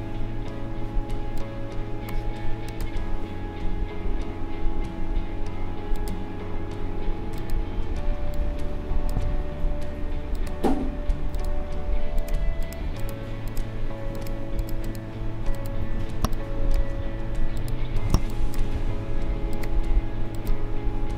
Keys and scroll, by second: 8.1 space, 16.2 space.